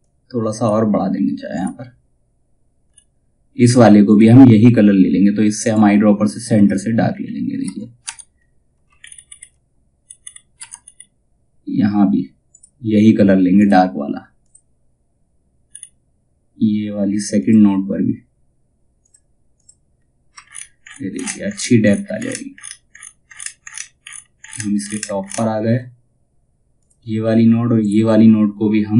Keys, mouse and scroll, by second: 2.4-3.6 scroll up 1, 3.6 click, 6.6 scroll down 1, 9.6-10.3 scroll up 1, 12.0 click, 15.2 scroll up 1, 16.9 click, 19.4-19.9 scroll down 1, 22.4 alt+scroll up 1, 26.3 click.